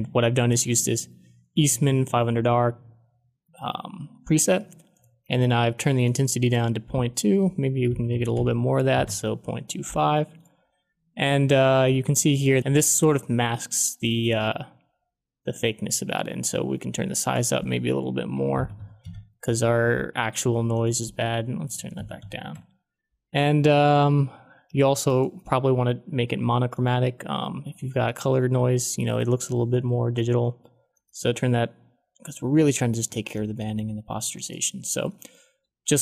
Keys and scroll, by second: 7.6-8.8 typing, 8.9 Return, 18.0-19.2 typing, 21.4-22.9 typing.